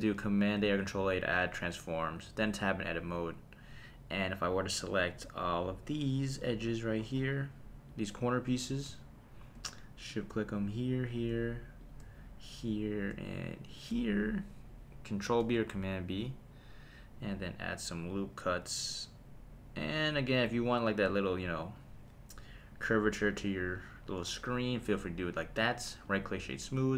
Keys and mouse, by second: 0.6 super+a, 2.3 Tab, 5.0 click, 5.9 click, 7.9 click, 10.1 shift+click, 11.8 shift+click, 13.7 shift+click, 15.4 super+b, 21.6 click, 23.2 Tab, 26.0 right click.